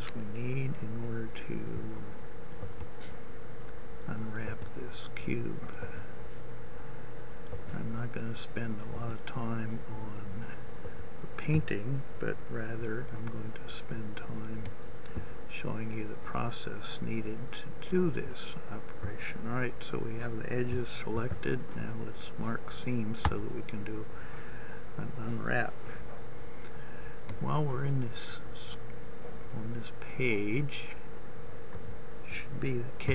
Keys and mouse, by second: 13.1-14.5 middle drag, 21.5 ctrl+e, 26.7-32.9 middle drag, 32.9 a.